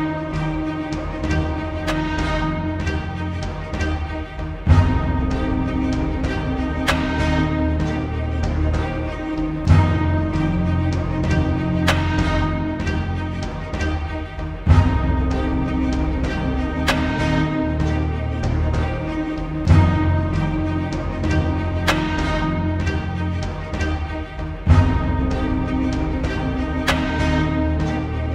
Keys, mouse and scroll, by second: 0.0 space, 0.4-1.5 drag, 3.1 alt+scroll up 1, 3.4 space, 3.5-4.1 click, 3.9 space, 4.4 click, 11.3 b, 12.1 right click, 13.4 click, 16.3 click, 17.3 click, 19.1 right click, 20.3 click, 21.1 Return, 21.8-22.9 drag, 25.2 space, 25.3-28.3 drag.